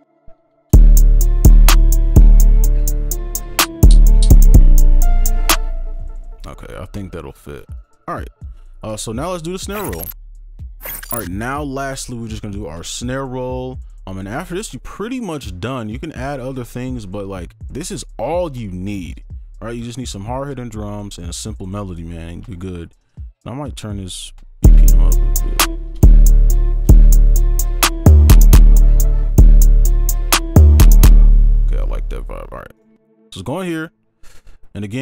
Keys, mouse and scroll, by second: 0.4 ctrl+shift+Down, 0.7 shift+space, 3.8 double click, 5.5 space, 6.3 shift+click, 7.7 right click, 24.1 double click, 25.7 space, 25.8 scroll up 1, 26.5 scroll up 1, 26.9 space, 29.1 scroll down 1, 29.4 space, 31.5 space, 32.7 right click, 34.5-35.0 scroll up 1.